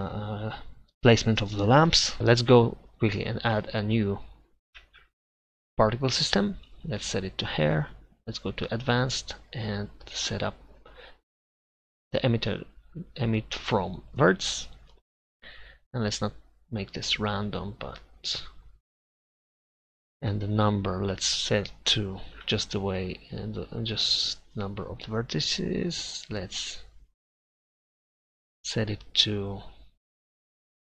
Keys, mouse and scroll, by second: 2.2-3.8 drag, 3.7 right click, 3.8-5.0 right drag, 5.0-12.0 drag, 14.1-16.0 middle drag, 16.0-17.8 drag, 20.7-26.0 drag.